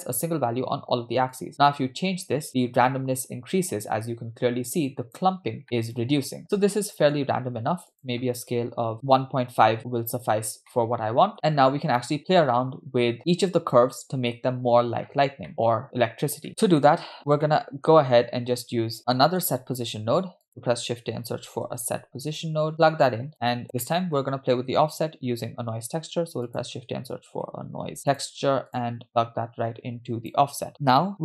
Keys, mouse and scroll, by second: 1.3-5.2 drag, 5.6-7.2 middle drag, 7.9-8.9 drag, 10.4 scroll down 2, 10.7-11.3 middle drag, 12.2 middle click, 12.5-13.6 scroll up 3, 15.1-15.5 scroll down 2, 15.5 middle click, 16.1-16.5 scroll down 2, 16.5 middle click, 17.5 scroll up 4, 17.5 middle click, 19.2 middle click, 19.8 shift+a, 23.3 click, 23.8 middle click, 26.0 shift+a, 29.1-30.4 drag.